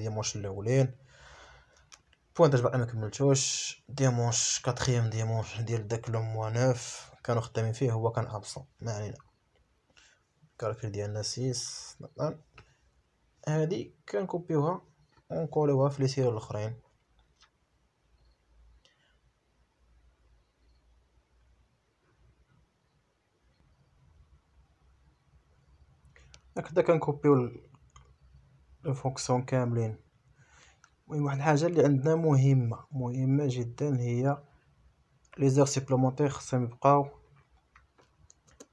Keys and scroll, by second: 2.2 Right, 3.5 Left, 4.3 BackSpace, 5.3 shift+c, 6.6 shift+j, 7.2 Return, 20.1 Escape, 32.5 Return.